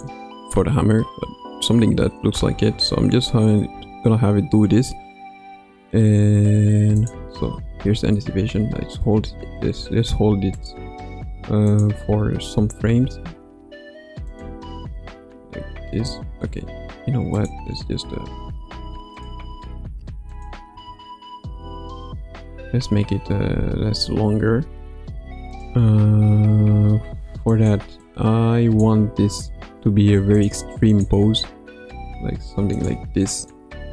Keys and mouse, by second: 0.0-1.2 drag, 0.0 space, 2.5 space, 3.7 space, 6.9 click, 7.8 space, 8.9 space, 10.5 click, 11.6 click, 12.1 space, 14.4 click, 14.4 space, 14.8 space, 16.0 space, 17.3 click, 18.6 g, 20.3 click, 20.7 space, 22.4 space, 25.5 click, 27.5 click, 28.0 click, 30.8 click, 31.7 r, 33.4 shift+click.